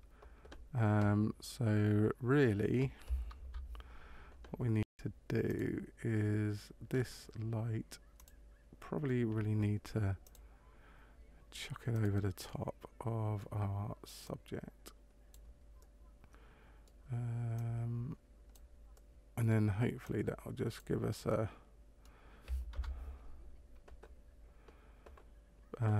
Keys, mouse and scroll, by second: 3.3 KP_0, 5.5 click, 6.8-8.1 scroll down 4, 8.1 click, 10.2 click, 11.9 right click, 12.4 middle click, 14.2 click, 15.7 middle click, 17.5 click, 18.9 middle click, 20.0 click, 21.2 middle click, 22.7 KP_0.